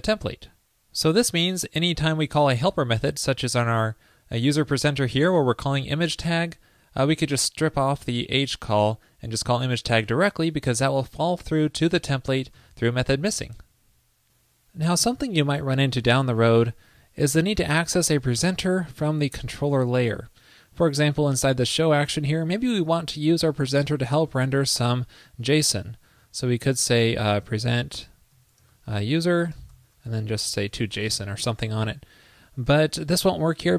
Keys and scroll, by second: 2.8 alt+super+Left, 12.7 super+s, 33.7 super+Left.